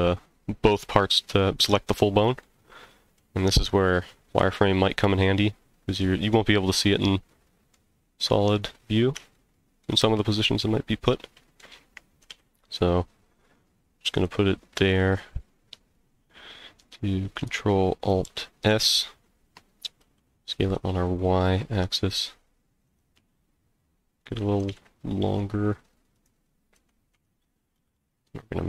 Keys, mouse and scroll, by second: 2.4 middle click, 3.5 z, 4.8-6.0 middle drag, 7.0 middle click, 7.9-8.3 scroll down 1, 8.7-9.3 scroll up 2, 9.3 shift+middle click, 10.2-11.6 middle drag, 12.2 g, 14.1 click, 18.2 ctrl+alt+s, 20.0 y, 22.9 click, 23.1 s, 24.2 click, 24.6 g, 24.7 z, 26.1 click, 26.7 g, 27.1 x, 27.7 y.